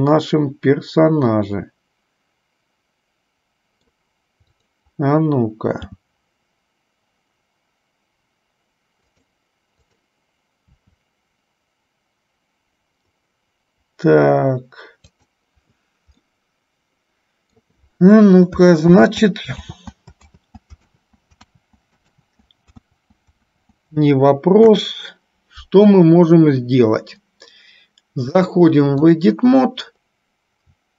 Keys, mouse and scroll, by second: 4.8 click, 6.2 g, 10.2 click, 11.2 g, 16.6-17.9 middle drag, 19.1 ctrl+z, 20.1 ctrl+z, 20.7 ctrl+z, 21.9 ctrl+z, 23.3 ctrl+z, 23.8 ctrl+z, 24.9 KP_1, 28.4-29.6 drag.